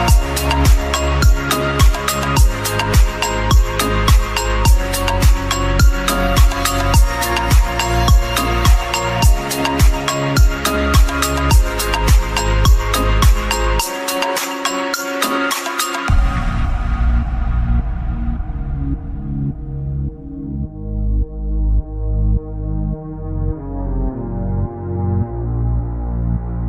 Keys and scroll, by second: 11.1 ctrl+z, 14.6 space, 16.8 ctrl+z, 18.0 [, 18.3 [, 18.8 [, 20.2 ], 22.9 ], 23.1 ], 25.1 ].